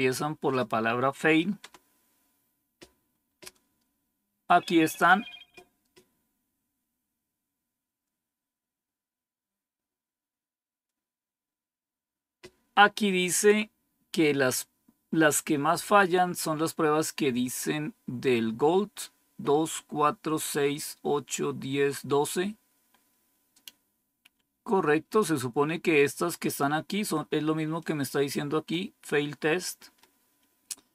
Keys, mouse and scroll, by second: 1.6 Return, 27.7 click.